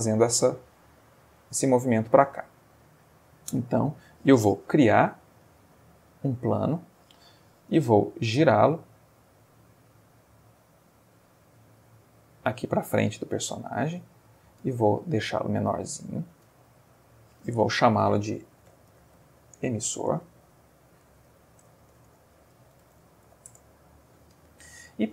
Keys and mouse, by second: 0.4-1.2 middle drag, 1.3-1.9 middle drag, 1.9 Escape, 2.4 middle click, 3.3-4.1 ctrl+middle drag, 4.9 shift+a, 5.9 click, 9.2 r, 10.9 click, 11.4-14.5 middle drag, 14.7 Tab, 14.8 s, 16.1 click, 16.5 Tab, 16.9 middle click, 17.9 F2, 18.7-19.6 typing, 21.0 ,, 21.1 o, 21.3 s, 21.6 BackSpace, 22.7-23.3 typing, 23.5 Return.